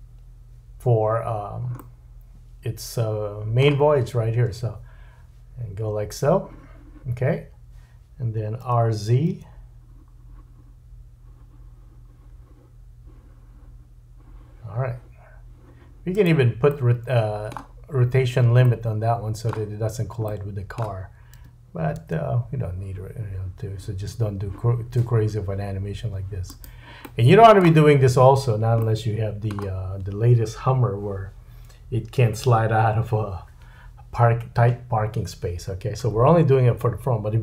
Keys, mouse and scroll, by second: 1.3-1.8 scroll down 3, 1.8 middle click, 4.3 space, 7.3-37.4 middle drag, 8.6 r, 21.4 r.